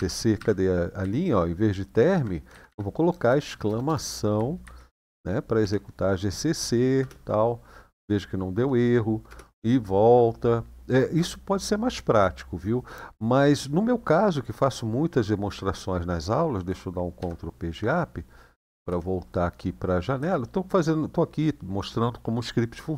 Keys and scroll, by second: 0.1 Up, 0.8 Left, 1.4 Left, 1.4 typing, 1.5-1.9 Left, 2.2 Left, 2.3 Left, 2.5 Left, 2.9-4.4 typing, 5.4 Delete, 6.7 Return, 9.0 Return, 17.0 ctrl+Page_Up, 18.3 Page_Down, 18.6 Page_Down, 19.9 Page_Down.